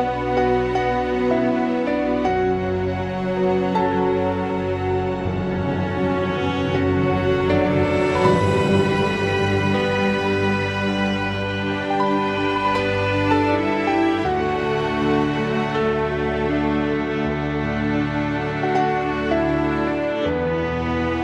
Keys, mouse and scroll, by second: 0.5 1, 1.6 click, 2.9 e, 3.7 2, 4.8 shift+click, 6.2-7.1 right drag, 7.1 shift+click, 7.9 g, 9.2 click, 10.7-11.6 drag, 12.4-14.7 middle drag, 16.0-17.8 middle drag, 17.8 click, 19.1 click, 19.8 click, 20.1-21.2 drag.